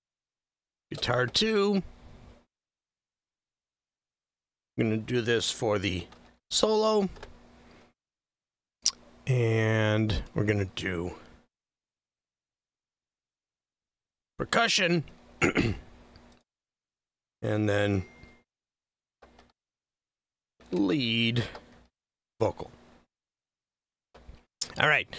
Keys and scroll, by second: 0.0-1.5 typing, 5.8-7.0 typing, 7.1 Return, 11.8-14.7 typing, 19.4-22.9 typing, 24.0 Return.